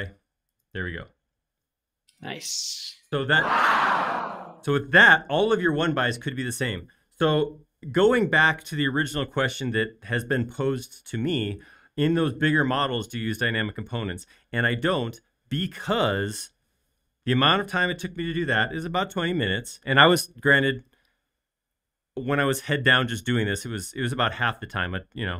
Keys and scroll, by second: 0.5 space.